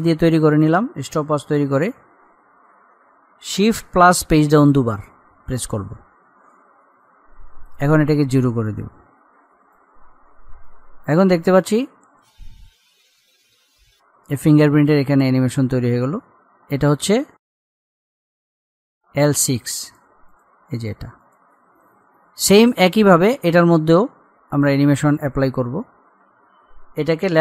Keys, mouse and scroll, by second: 4.1 shift+Page_Down, 7.9-16.5 drag, 16.5 scroll down 1, 19.0 click, 24.5-25.5 scroll up 1.